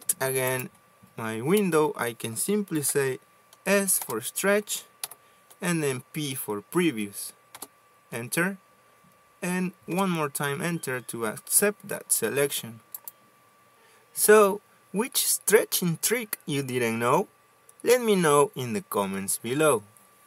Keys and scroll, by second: 0.5 space, 2.1 Escape, 2.5 Escape, 3.4 s, 4.6 Return, 5.6 p, 8.1 Return, 10.6 Return, 16.3 Escape.